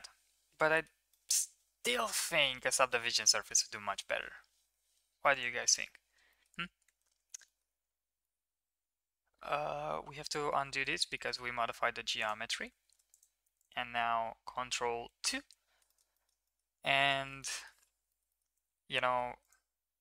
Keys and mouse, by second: 1.1-1.5 middle drag, 2.5 middle click, 3.3 middle drag, 6.3 middle click, 7.0 ctrl+s, 7.4 shift+middle drag, 8.2 middle click, 8.5 ctrl+z, 8.7 ctrl+z, 8.8 ctrl+z, 9.0 ctrl+z, 10.3 Tab, 10.8 middle click, 11.1 shift+middle drag, 12.2 click, 12.6 ctrl+s, 13.1 click, 13.6 click, 15.0 ctrl+2, 15.9 shift+middle click, 16.1 middle drag, 16.5 middle click, 17.0 Tab, 17.4 shift+middle click, 17.6 middle click, 18.1 shift+middle click, 18.3 middle drag, 19.3 ctrl+r.